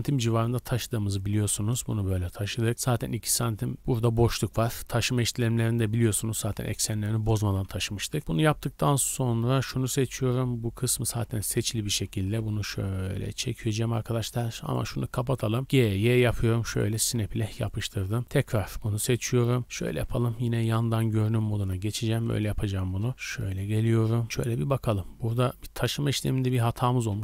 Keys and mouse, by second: 1.0 middle click, 1.0-1.4 drag, 1.3 z, 8.2 z, 9.9 Tab, 11.2 z, 11.9 g, 12.7-14.7 drag, 14.9 click, 15.6 g, 17.3 Tab, 17.6 click, 18.0-19.6 drag, 20.3 KP_2, 20.8 KP_1, 21.5 z, 22.2 KP_3, 23.2-24.6 shift+middle drag, 24.7-27.0 middle drag, 27.0 ctrl+click, 27.1 ctrl+z.